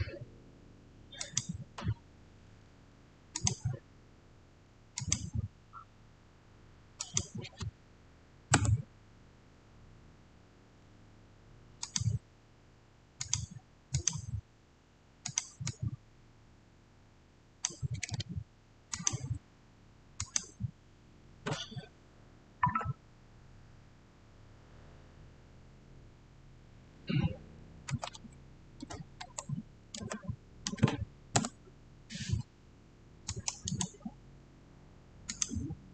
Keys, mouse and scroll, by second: 1.1 click, 3.2 click, 6.9 click, 8.4 Return, 11.7-19.6 drag, 27.6-28.5 typing, 27.8 click, 29.1 Tab, 29.9-30.5 typing, 31.2 Return, 33.2 click, 33.5 right click, 35.2 click.